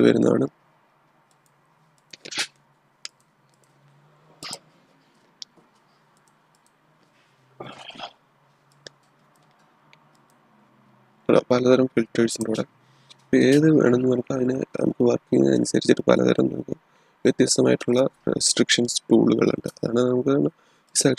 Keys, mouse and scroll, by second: 1.3 click, 8.6-10.0 drag, 12.2 click, 20.8 click.